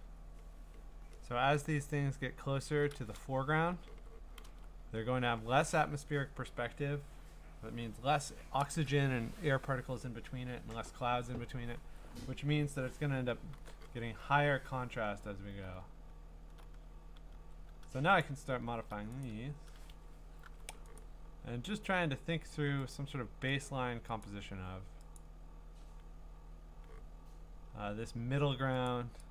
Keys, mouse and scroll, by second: 2.0-2.8 scroll, 3.8-4.9 typing, 14.0 b, 15.3-16.8 scroll, 17.3 v, 18.2 click, 18.6 scroll, 19.2 middle click, 19.2 right click, 20.0 Escape, 20.5 u, 21.0 right click, 22.0 middle click, 22.1 middle click, 22.2 middle click, 22.9 click, 23.6 click, 24.2 click, 25.2 click, 25.5-27.7 scroll down 17, 28.2 scroll, 28.9 click.